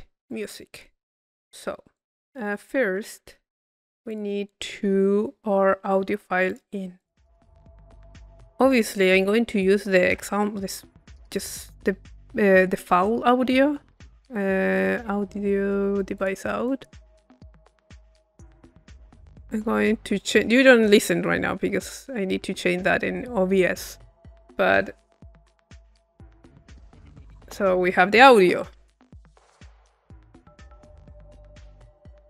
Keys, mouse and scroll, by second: 0.2 click, 1.2 middle click, 1.9-3.4 drag, 3.4 Tab, 4.1 click, 6.5 click, 7.4-8.5 middle drag, 8.7 click, 9.6 click, 10.1 Tab, 10.4 click, 10.8 click, 16.1 click, 20.8-24.0 drag, 24.1-25.7 drag.